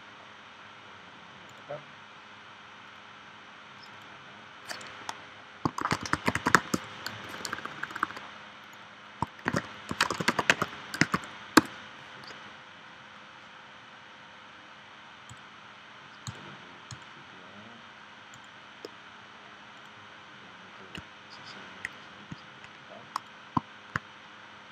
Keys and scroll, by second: 5.8 shift+e, 6.7 o, 7.1 BackSpace, 9.4-11.1 typing, 11.5 Return.